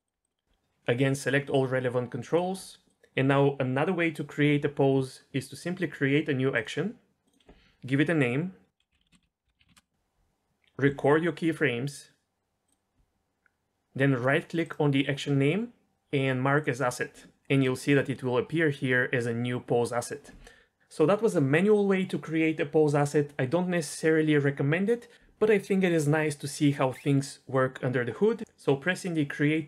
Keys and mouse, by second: 0.0 click, 0.2 r, 0.3 middle click, 1.5 click, 1.8-2.3 drag, 2.9 ctrl+click, 7.4-9.7 drag, 10.8 i, 15.7-17.2 drag.